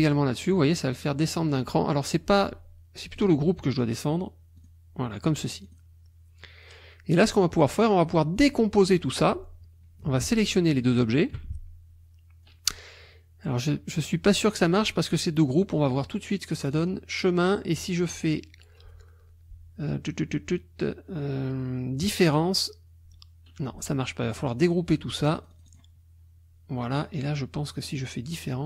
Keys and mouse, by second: 0.5 click, 3.2 click, 4.6 click, 5.7 click, 7.5 click, 10.8 shift+click, 16.7 click, 22.0 click, 25.3 click, 27.8 click.